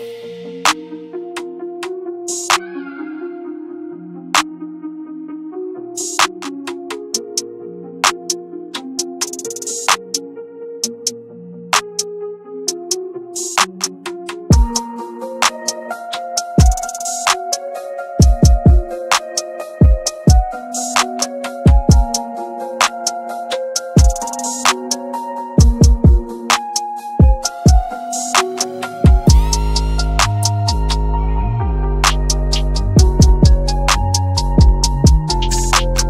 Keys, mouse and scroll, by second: 1.8 scroll up 1, 2.4 scroll down 1, 2.9-6.4 drag, 7.1-9.9 shift+drag, 9.9-10.3 scroll down 1, 10.3-11.6 scroll up 1, 11.6 click, 12.1 scroll up 1, 12.7-14.3 ctrl+drag, 14.3 ctrl+space, 15.2 click, 16.0 right click, 16.6 scroll down 1, 17.0-17.7 scroll up 1, 17.9-19.3 shift+drag, 19.3-19.8 scroll down 1, 21.4-22.1 scroll up 1, 22.1-23.7 drag, 23.7 right click, 24.3 click, 25.0-25.5 scroll down 1, 25.5 F2, 26.7-28.7 drag, 28.7 F9, 30.7 ctrl+F9.